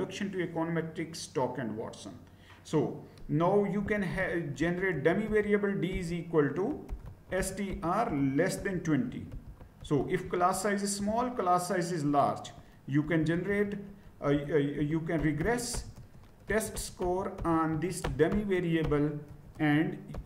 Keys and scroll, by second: 3.6-9.7 typing, 10.9 Return, 12.9-20.2 typing.